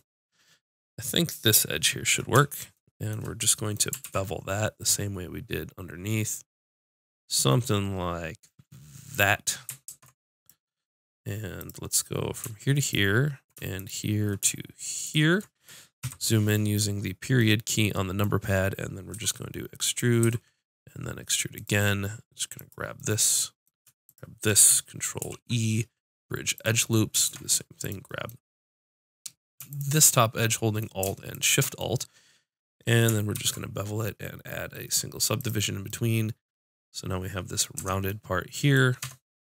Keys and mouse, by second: 4.0 ctrl+b, 9.1-11.0 drag, 9.8 ctrl+Tab, 11.5-13.0 drag, 16.0 KP_Decimal, 19.1 e, 20.1-22.5 drag, 20.3 e, 22.6 click, 25.2 ctrl+e, 27.2 ctrl+Tab, 29.6-32.3 drag, 33.3 ctrl+b, 37.7 Tab, 39.0 Tab.